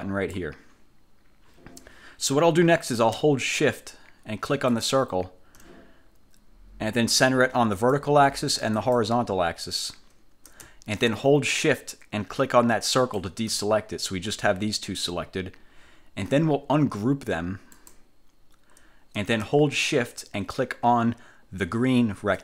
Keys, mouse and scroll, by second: 4.8 shift+click, 7.9 click, 8.9 click, 13.1 shift+click, 17.9 click.